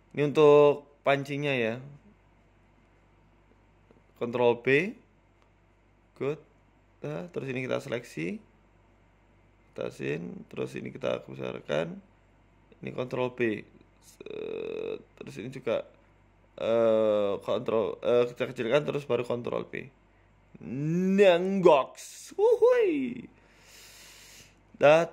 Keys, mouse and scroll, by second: 0.2 ctrl+r, 2.0 ctrl+r, 2.6 s, 3.8 ctrl+b, 6.5 middle click, 7.1 KP_4, 7.4 KP_1, 8.4 click, 8.8 click, 9.7 s, 10.5 g, 11.6 ctrl+r, 12.1 s, 13.8 ctrl+g, 14.5 ctrl+b, 16.7 click, 17.7 e, 18.1 s, 18.5 ctrl+z, 18.9 s, 20.1 g, 21.6 ctrl+b, 22.7 Tab, 22.9-23.3 scroll down 3, 23.2-23.5 scroll up 5, 23.5 shift+middle click, 23.8-24.2 scroll down 8, 24.2 shift+middle click, 24.5 scroll up 1, 24.8 shift+middle click, 25.0 Tab.